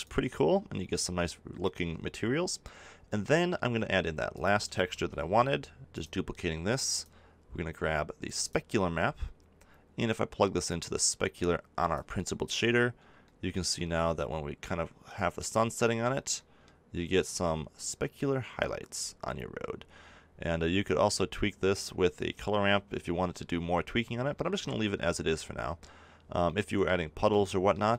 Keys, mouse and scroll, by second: 3.2-4.3 middle drag, 4.3 right click, 9.1 click, 24.6 click.